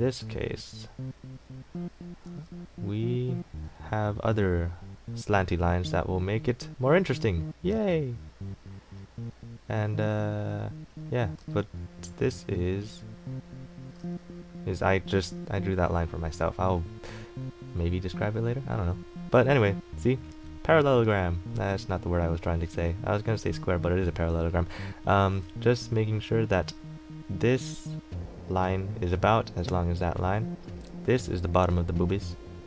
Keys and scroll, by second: 7.9 ctrl+z, 11.6 ctrl+z, 14.2 ctrl+z.